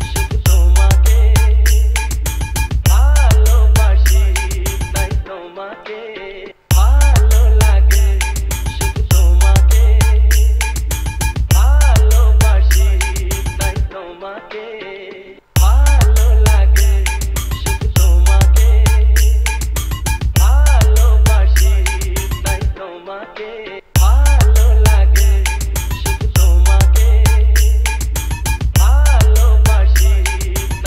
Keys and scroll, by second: 6.7 space, 15.5 space, 24.0 space.